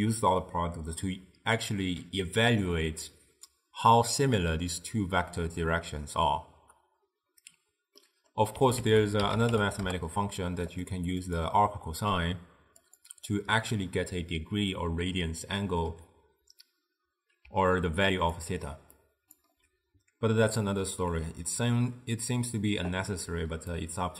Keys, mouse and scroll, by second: 8.1-8.9 middle drag, 8.9 ctrl+a, 11.3-14.3 drag, 17.6-19.6 typing, 18.1 click, 19.1 click, 23.2 d, 23.7 d, 23.8-24.1 right drag.